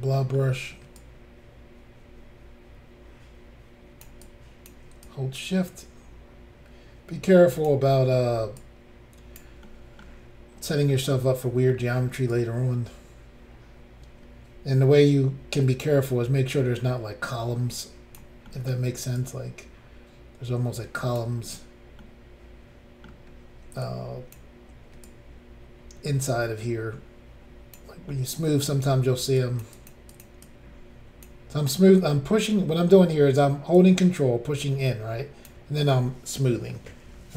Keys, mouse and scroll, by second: 0.1 middle click, 1.0 ctrl+click, 4.2 ctrl+click, 5.0 shift+click, 7.9 middle click, 8.1 middle click, 8.6 shift+click, 9.7 middle click, 10.9 middle click, 12.3 ctrl+click, 18.5 middle click, 19.2 ctrl+click, 22.0 middle click, 23.8 shift+click, 25.0 ctrl+click, 28.1 middle click, 29.4 shift+click, 29.7 shift+click, 29.9 shift+click, 30.1 shift+click, 30.2 shift+double click, 30.4 shift+click, 33.7 ctrl+click, 36.0 middle click, 37.1 scroll down 2.